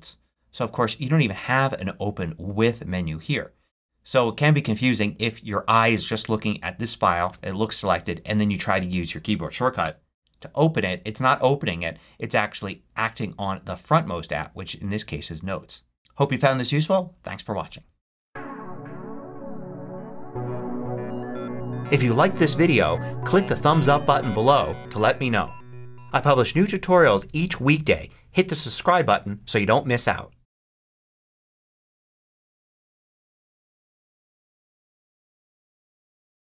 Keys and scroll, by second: 9.7 ctrl+shift+b.